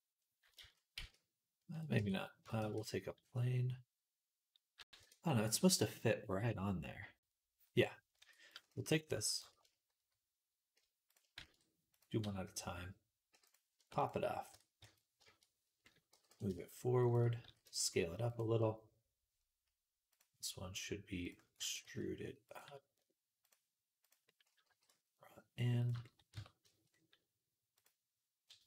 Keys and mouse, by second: 0.4 ctrl+z, 0.8 ctrl+z, 1.8 Tab, 2.4 shift+a, 8.1 Tab, 11.2 shift+d, 13.2 p, 13.6 Tab, 14.4 Tab, 14.7 a, 15.0-24.8 shift+drag, 16.0 g, 17.3 s, 21.5 e, 24.8 g, 25.8 shift+middle click, 26.2 Tab, 26.5 shift+middle click, 27.6 click, 28.5 Tab.